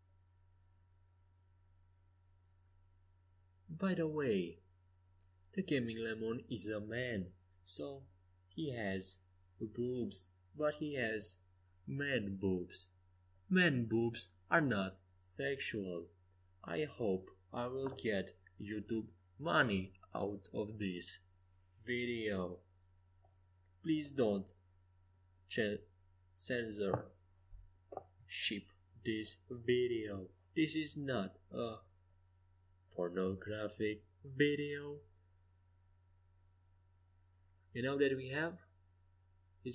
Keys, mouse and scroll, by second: 0.7 KP_5, 1.1 KP_1, 1.5 KP_3, 2.0 KP_5, 3.6-4.8 middle drag, 7.1 KP_5, 7.2 KP_1, 7.7 KP_3, 8.0 KP_5, 9.4 g, 12.6-15.4 middle drag, 15.5-19.2 middle drag, 16.0 g, 20.4-24.0 right drag, 20.8 g, 26.2-27.4 middle drag, 29.0 Tab, 29.6 Tab, 30.1 KP_5, 30.4 KP_1, 30.6 KP_3, 30.9 KP_5, 34.3 z, 37.0-39.7 drag, 37.6-39.7 right drag.